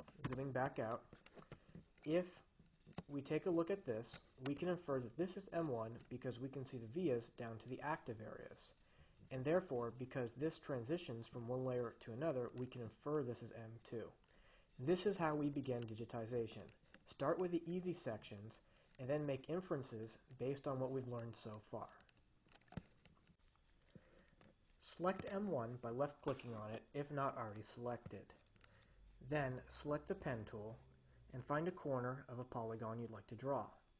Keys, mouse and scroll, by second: 0.3 5, 0.7 Return, 3.5-5.0 drag, 25.6 click, 26.9 Escape.